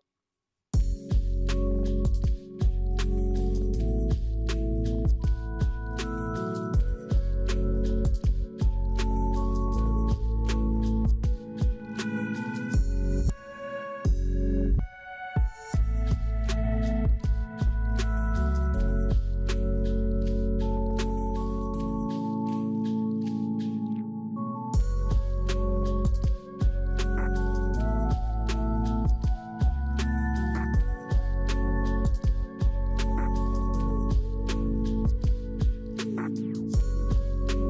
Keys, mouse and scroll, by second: 6.6 scroll down 4, 7.0 middle click, 11.1 shift+click, 14.1 middle click, 15.4 double click, 15.6 double click, 26.4 double click, 27.7 double click, 28.5 middle click.